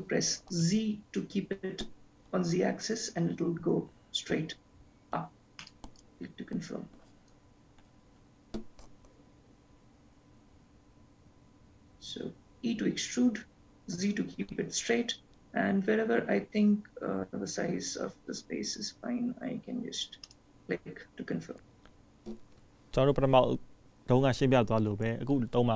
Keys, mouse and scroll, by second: 7.3 click, 8.3 ctrl+z, 9.1 ctrl+z, 12.5 e.